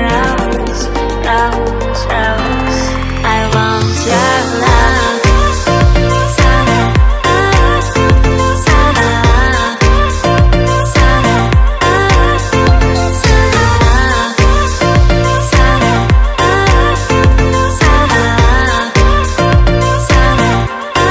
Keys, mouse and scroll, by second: 0.1 click, 0.7 click, 0.8 double click, 1.6 double click, 3.8 click, 5.5 click, 6.9 ctrl+c, 7.5 click, 8.2 click, 9.2 click, 10.5 click, 14.3 click, 15.5 ctrl+v, 16.6 click, 17.4 click, 18.2 click, 19.5 click, 20.5 click.